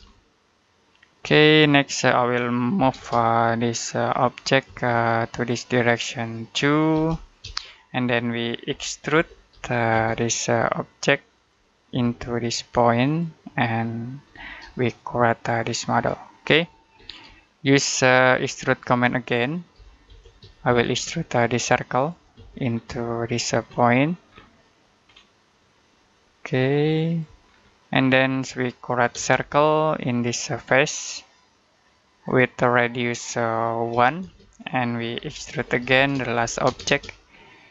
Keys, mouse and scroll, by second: 0.0 shift+middle click, 1.4-2.6 scroll up 1, 2.6 m, 2.8 space, 4.1 click, 4.5 space, 4.8 click, 6.8 2, 7.3 space, 8.3-9.9 typing, 11.2 click, 11.8 space, 12.9 click, 14.1-14.5 scroll down 1, 14.7 shift+middle click, 17.2 shift+middle click, 18.5-19.6 scroll up 1, 19.4-20.8 typing, 20.9-21.8 scroll up 1, 21.8 click, 22.2 space, 22.4-22.8 scroll down 1, 22.8 middle click, 23.1-24.1 scroll up 1, 24.1-24.4 scroll down 1, 24.4 middle click, 24.9-25.5 scroll up 1, 26.9 click, 27.3-27.8 scroll down 1, 27.8 middle click, 29.0 c, 29.2 space, 29.5-30.5 scroll up 1, 32.0 click, 33.8-36.5 typing, 34.5 middle click, 37.1 scroll down 1, 37.3 middle click.